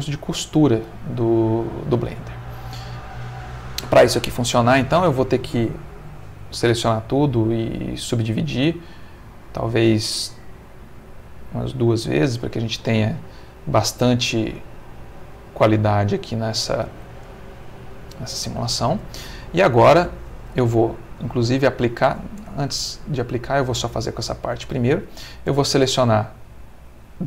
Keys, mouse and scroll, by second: 0.2-3.2 middle drag, 3.3 middle click, 4.9 a, 7.6 right click, 8.7 click, 10.5 click, 11.6 click, 12.6 middle click, 13.3-17.0 middle drag, 17.4 middle click, 18.4 shift+middle click, 21.1 Tab, 22.3 Tab, 23.1 middle click, 25.3 alt+click, 27.0 click.